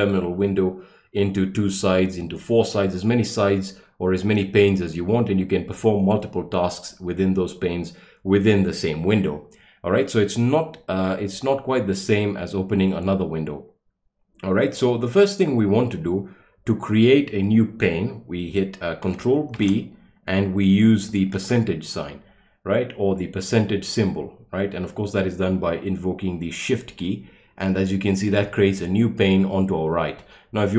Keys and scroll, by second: 19.5 ctrl+b, 21.3 shift+5.